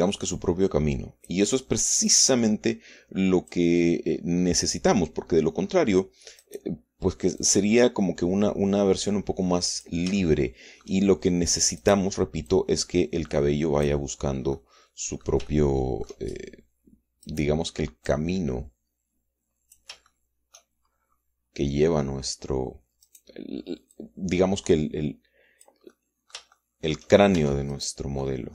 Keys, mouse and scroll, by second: 0.1 Tab, 1.2-2.4 drag, 3.0-4.6 drag, 5.4 click, 7.3 right click, 8.3-10.9 drag, 11.1 shift+middle click, 12.7 click, 13.4-15.0 drag, 15.4 click, 16.4 shift+middle click, 18.2 click, 19.0-20.8 drag, 20.8 shift+middle click, 21.8-22.2 shift+scroll up 3, 22.2-24.0 middle drag, 24.0 right click, 24.8-26.7 drag, 26.8-28.0 middle drag, 28.2 shift+Tab.